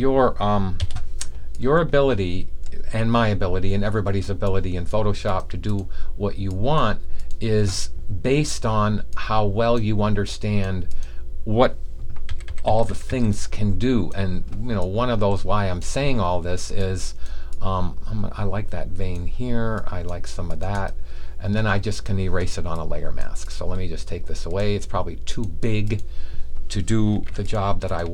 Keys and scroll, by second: 12.2-13.0 typing.